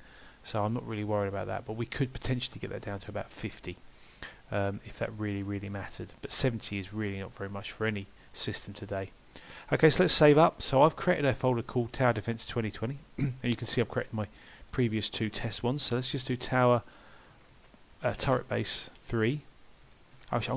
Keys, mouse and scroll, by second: 3.8 middle click, 4.7 scroll up 2, 5.0 scroll down 2, 5.8 Tab, 5.8 scroll down 2, 6.2 middle click, 7.6 scroll up 1, 8.3 middle click, 10.4 ctrl+s.